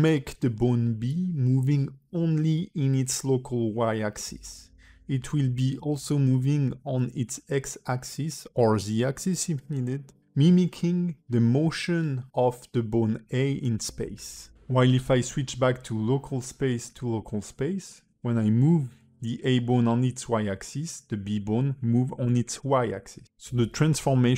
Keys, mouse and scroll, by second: 0.5 r, 1.6 click, 2.8 g, 6.4 click, 6.9 g, 8.4 r, 9.6 middle click, 10.1 r, 10.8 click, 11.3 g, 12.9 alt+middle click, 14.0 KP_1, 14.6 g, 14.7 click, 14.7 click, 15.7 click, 17.9 click, 18.3 g, 22.7 click, 23.2 alt+r, 23.8 click.